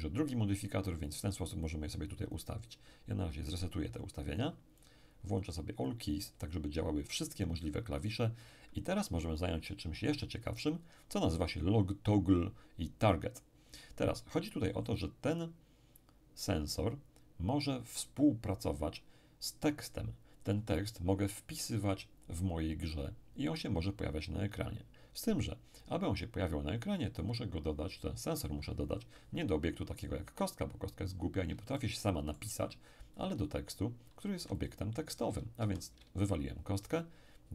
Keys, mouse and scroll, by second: 1.7 click, 4.4-6.8 drag, 14.8-15.8 scroll down 1, 16.1-17.1 scroll down 2, 30.7-31.7 scroll down 3, 31.7-33.3 shift+middle drag, 34.3 x, 34.6 click, 35.6 shift+a.